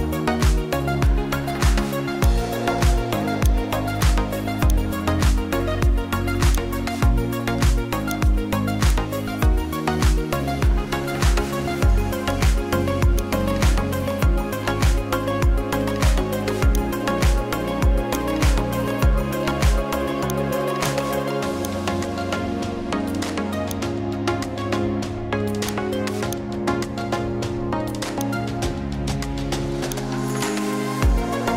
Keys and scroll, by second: 19.4 Return.